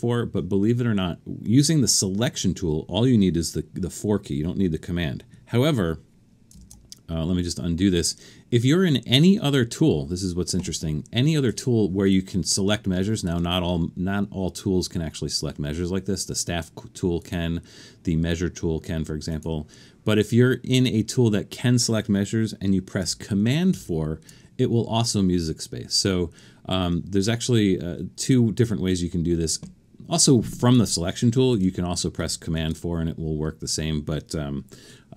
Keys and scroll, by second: 8.1 super+z, 23.7 super+4, 31.5 super+z, 32.6 super+4.